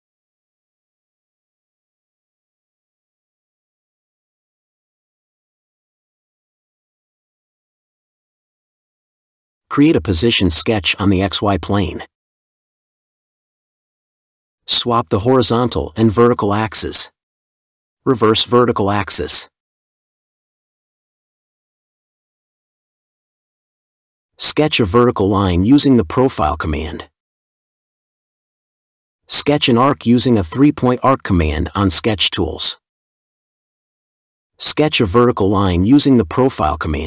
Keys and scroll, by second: 0.0-3.1 typing.